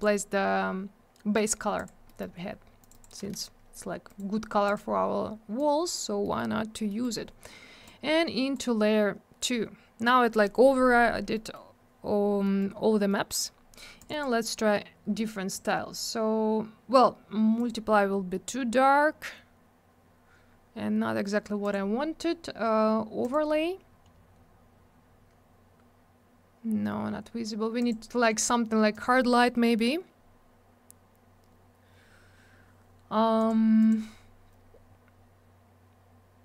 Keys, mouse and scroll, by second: 0.0 double click, 1.3 right click, 1.4 right click, 1.8 click, 1.8 double click, 2.1 middle click, 2.2 middle click, 2.3 scroll up 1, 2.8 click, 2.9 click, 2.9 click, 3.0 click, 4.1 right click, 4.2 right click, 4.7 click, 4.7 click, 5.6 click, 6.2 middle click, 6.4 middle click, 6.5-6.9 scroll up 1, 6.9 middle click, 7.0 middle click, 7.9 click, 11.3 middle click, 11.5 middle click, 12.4 middle click, 12.6 middle click, 13.1 middle click, 14.0 click, 14.1 click, 14.1 click, 14.2 double click, 15.5 click, 15.6 click, 17.6 click, 17.7 click, 21.6 click, 21.7 click, 23.2 click, 23.3 click, 25.8-26.8 scroll up 1, 26.8 scroll down 1, 27.8 click, 27.9 click, 28.9 click, 29.0 click, 30.5 scroll up 1, 32.5 scroll down 1, 33.4 click, 33.5 click, 33.8 click, 33.9 double click.